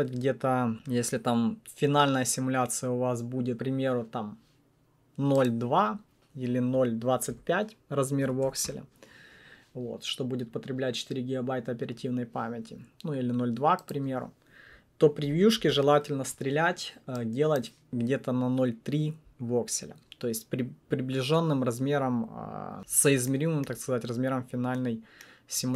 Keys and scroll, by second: 7.3 alt+BackSpace, 8.0-8.9 typing, 15.2 BackSpace, 15.5 Return.